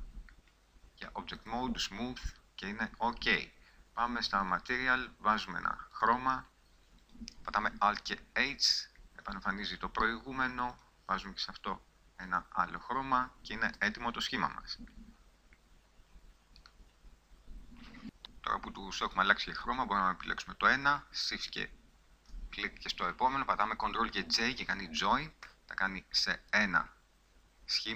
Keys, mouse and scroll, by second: 8.1 alt+h, 13.1 middle click, 13.9 a, 14.9-17.1 middle drag, 24.7 ctrl+j, 25.9 Tab.